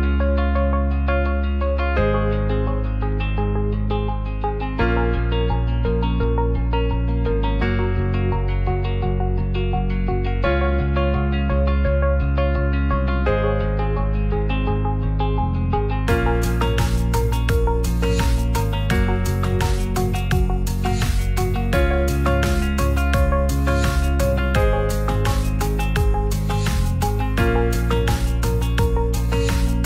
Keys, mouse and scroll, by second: 0.8 click.